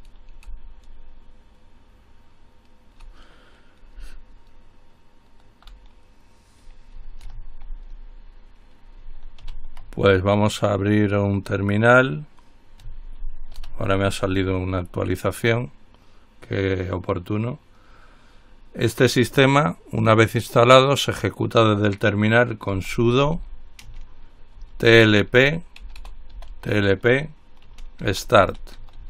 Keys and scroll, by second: 2.0 c, 4.7 Delete, 4.9 Delete, 7.4 alt+F4, 9.6 ctrl+alt+t, 13.8 ctrl+alt+t, 22.8-26.9 typing, 28.0-29.0 typing.